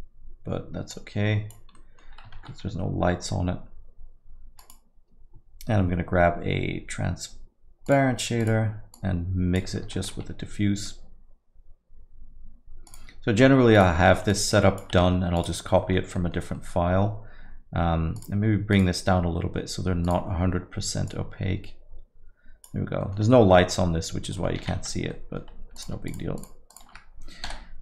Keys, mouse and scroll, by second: 1.0 click, 1.8 middle click, 2.4 shift+a, 8.9 click, 10.0 shift+a, 14.4 click, 15.5 ctrl+shift+click, 15.8 middle click, 16.2 middle click, 17.3 middle click, 18.2 click, 18.7 click, 23.0 click, 23.0 middle click, 23.6 middle click, 23.8-24.4 scroll down 3, 24.4 middle click, 24.6 z, 25.1 alt+middle click, 25.4 alt+middle click, 25.8 click, 26.1 shift+click, 26.4 click, 26.7 click, 27.7 Delete.